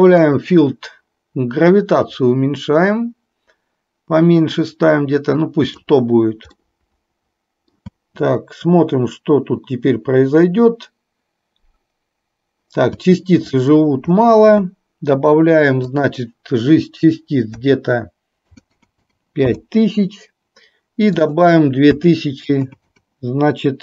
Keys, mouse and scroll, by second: 0.3 click, 2.0-6.0 drag, 6.7-8.0 middle drag, 8.1 space, 13.0 space, 16.1-19.5 drag, 18.7 KP_0, 21.3-23.8 drag, 22.8 KP_0.